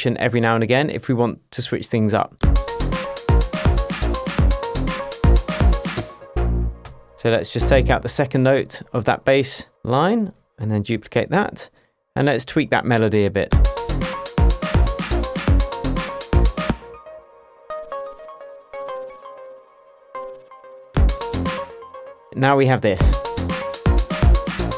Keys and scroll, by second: 2.4 space, 17.4 space, 17.9 Down, 20.5 BackSpace, 20.9 space, 23.0 space, 23.8 shift+space.